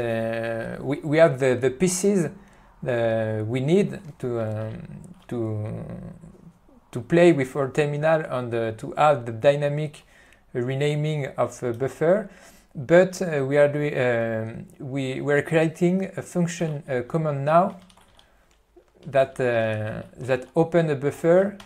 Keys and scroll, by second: 16.8 ., 17.3 Tab, 18.0 ctrl+g, 18.2 Tab, 19.4 ., 20.6 Tab.